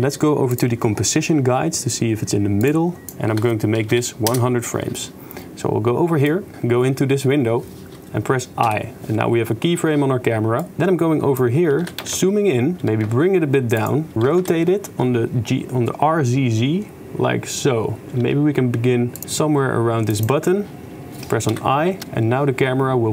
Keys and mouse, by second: 0.6 drag, 2.7 click, 3.0-4.4 drag, 4.4 0, 6.3 click, 8.7 i, 10.6 click, 11.9 g, 12.8 g, 14.1 r, 18.4 g, 19.2 g, 21.5 i, 22.0 shift+space.